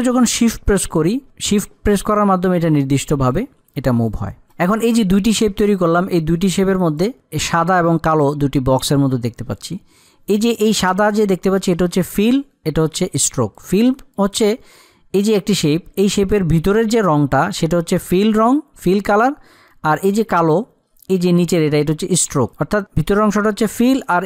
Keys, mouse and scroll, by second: 3.6 click, 10.0 click, 14.0 click, 22.4 click.